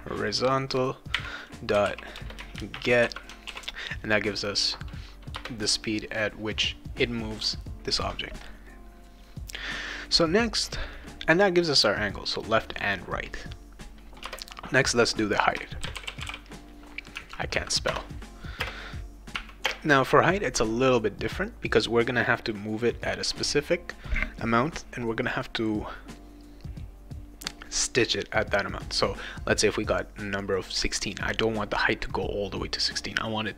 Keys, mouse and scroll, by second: 1.1-3.5 typing, 4.6 click, 5.3 Return, 14.2 Return, 15.6-16.7 typing, 17.9 Return, 18.6 space, 19.3 =, 19.6 space.